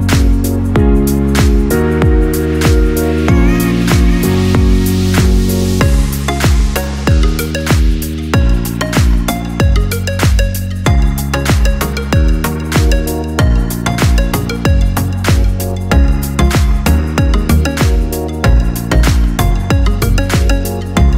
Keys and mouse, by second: 0.6 right click, 0.8 g, 2.8 Tab, 3.6-4.4 middle drag, 4.7 KP_1, 5.3 KP_3, 5.6 shift+a, 9.5 r, 11.2 s, 12.3 g, 13.1 KP_1, 13.8 shift+middle click, 14.5 g, 15.5 s, 16.4 KP_3, 17.0 shift+middle drag, 17.6 alt+z, 17.9 shift+middle click, 19.1 g, 19.8 KP_1, 20.5 alt+z, 20.9 shift+middle click.